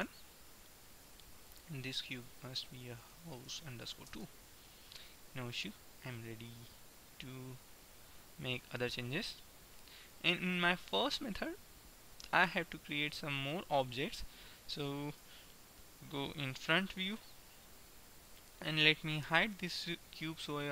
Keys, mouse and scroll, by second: 1.4-3.2 drag, 5.5-6.9 middle drag, 6.9 KP_1, 7.5-10.0 middle drag, 15.0 middle click, 15.4 KP_1, 18.4-20.4 right drag, 19.7 h.